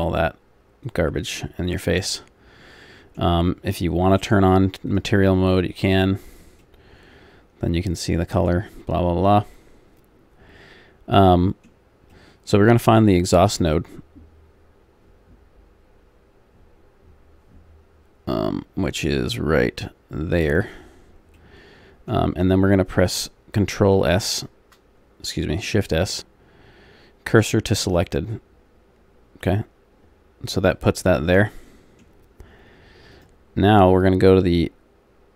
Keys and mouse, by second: 0.8-2.1 drag, 2.1 middle click, 4.2-6.6 drag, 6.6-10.9 middle drag, 11.5-15.3 middle drag, 15.3-20.3 middle drag, 20.3 right click, 21.3 middle click, 23.9 shift+s, 30.8-33.1 middle drag, 33.1-34.9 drag.